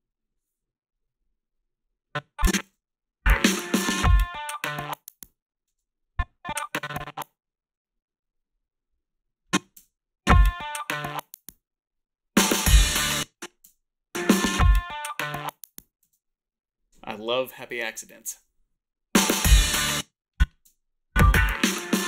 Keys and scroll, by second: 2.7 space, 5.7 space, 9.8 space, 12.9 space, 13.6 space, 16.0 space, 19.7 space, 20.6 space.